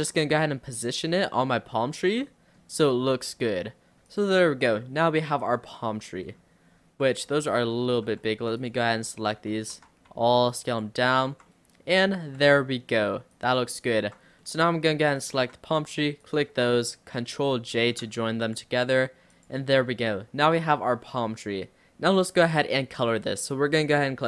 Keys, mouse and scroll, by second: 0.0-0.4 scroll up 4, 0.4-1.6 shift+middle drag, 1.6 r, 2.3 middle click, 3.0 r, 4.0-4.9 scroll down 7, 4.1 click, 4.9-5.5 middle drag, 5.5 scroll up 3, 5.7-6.3 middle drag, 6.3-6.7 scroll down 1, 6.7-7.1 scroll up 3, 7.1 Tab, 7.4 click, 8.4 Tab, 8.6 click, 9.2 Tab, 9.6 scroll up 1, 9.8 a, 10.2 s, 11.3 Tab, 11.5-12.4 middle drag, 12.4 scroll up 1, 12.5 Tab, 13.3 click, 14.0 Tab, 14.3-15.2 scroll down 3, 14.4-14.8 middle drag, 15.2 click, 16.2 shift+click, 17.9 ctrl+j, 18.5 click, 18.8-19.3 middle drag, 19.3 click, 19.7 scroll down 2, 19.8-23.2 middle drag.